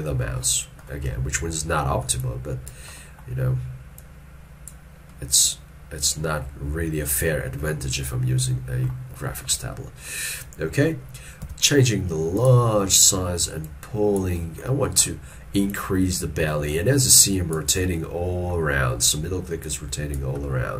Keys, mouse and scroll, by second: 7.4 shift+middle click, 7.8 scroll down 1, 13.0 middle click.